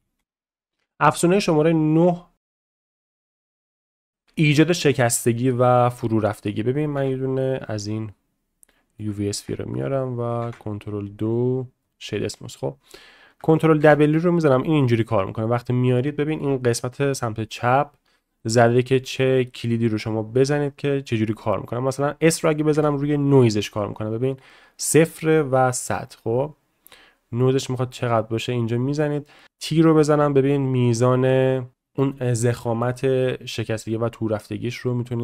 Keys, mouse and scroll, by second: 0.2 x, 8.3 click, 8.3 s, 8.7 middle click, 9.1 shift+middle drag, 10.5 ctrl+2, 13.9 ctrl+w.